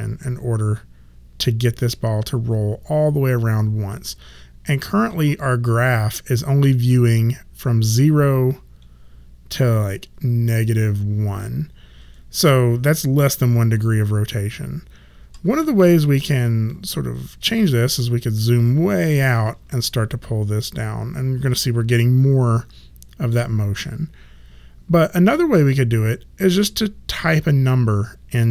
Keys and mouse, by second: 17.7 alt+right click, 19.8 shift+middle click.